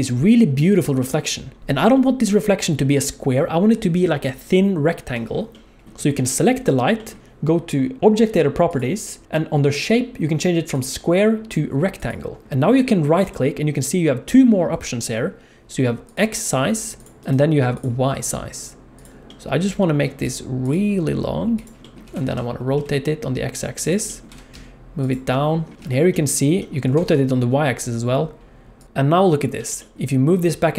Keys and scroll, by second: 22.0 r, 24.3 g, 26.8 r, 29.5 g.